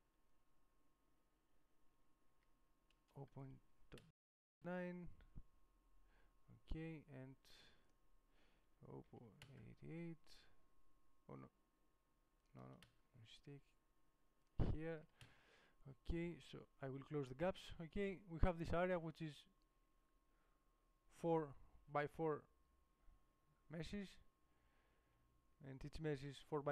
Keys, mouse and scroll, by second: 1.7-8.1 middle drag, 9.5 KP_8, 10.9-12.6 middle drag, 14.6 middle click, 15.3 KP_8, 16.7-17.9 middle drag, 21.4-26.3 middle drag.